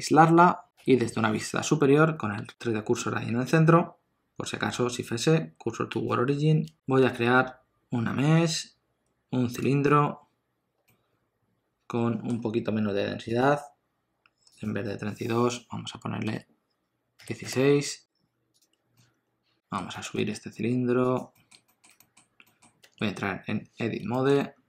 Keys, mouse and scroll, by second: 0.7 KP_7, 3.7 shift+s, 7.0 shift+a, 10.8 middle click, 13.3 click, 18.5 click, 18.9 middle click, 19.9 g, 21.3 middle click, 21.7 shift+middle click, 21.9 middle click, 22.7 Tab, 24.1 shift+middle click, 24.4 middle click.